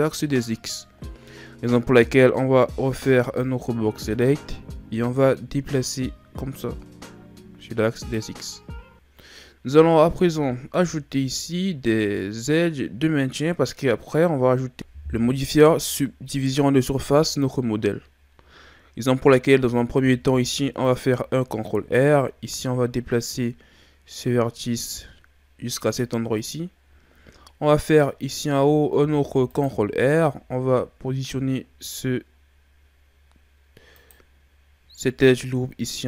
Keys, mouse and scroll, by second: 2.9 b, 5.7 click, 10.0-13.2 scroll down 4, 20.0 ctrl+r, 29.0 ctrl+r.